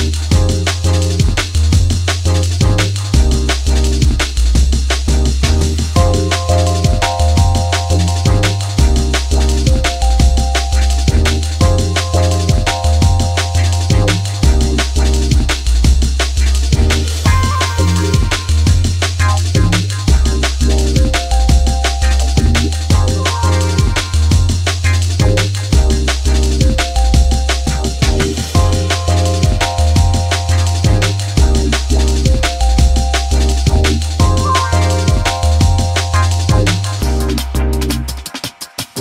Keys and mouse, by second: 0.1 click, 1.0 space, 2.2 space, 3.0 click, 8.7 click, 10.1 space, 12.6 click, 13.8 click, 14.9 click, 16.4 click, 17.8 click, 18.9 click, 19.5 click, 20.2 click, 21.6 click, 23.0 click, 23.7 click, 25.0 click, 26.4 click, 27.7 click, 29.0 click, 31.1 click, 32.5 drag, 33.2 drag, 33.8 click, 34.6 click, 35.6 click.